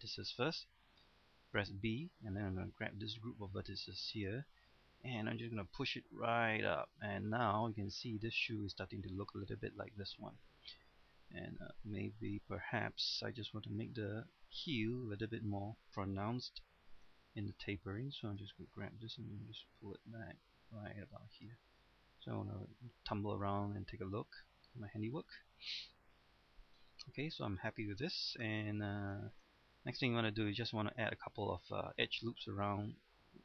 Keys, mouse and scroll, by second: 1.5 b, 2.4-7.9 drag, 10.6-11.4 scroll up 1, 11.4-12.3 scroll down 1, 12.3 typing, 14.8-15.5 typing, 16.9-17.6 typing, 17.6-21.9 drag, 21.9 middle click, 23.2 scroll up 1, 23.4 middle click, 25.5 scroll up 1, 25.7 middle click, 26.4 scroll up 1, 26.6-27.1 scroll down 1, 27.1-28.1 middle drag, 30.3 middle click.